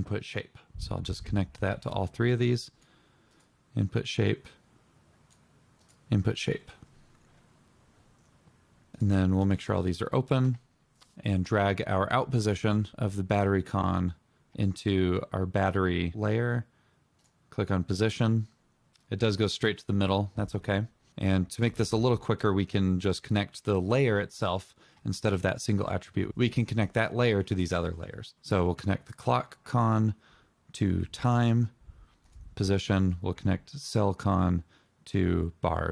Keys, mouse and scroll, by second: 7.9 double click.